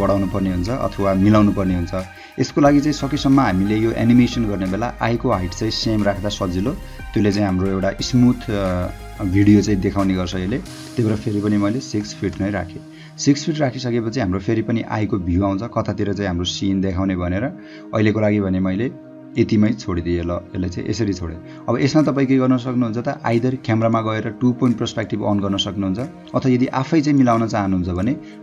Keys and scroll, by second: 11.5 6, 12.0 ', 12.3 Return.